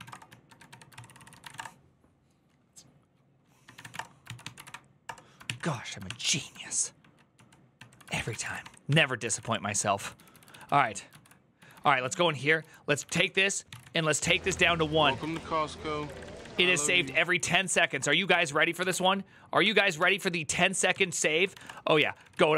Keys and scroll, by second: 0.0-1.8 typing, 3.4-4.9 typing, 5.2 ctrl+n, 5.8 ctrl+s, 7.1 ctrl+t, 7.5 ctrl+n, 7.8-19.0 typing, 9.2 Return, 10.9 ctrl+u, 14.4 ctrl+c, 18.1 ctrl+c, 19.4 Up, 19.7 Return, 20.7 ctrl+t, 21.0-22.5 typing, 21.9 ctrl+d.